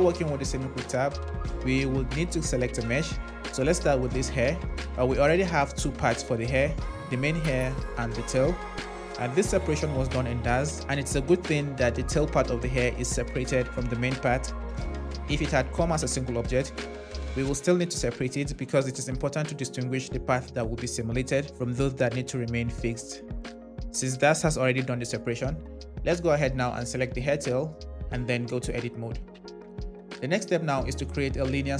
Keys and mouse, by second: 1.8 click, 4.4 click, 6.4 click, 8.1 click, 15.6 click, 28.0 Tab.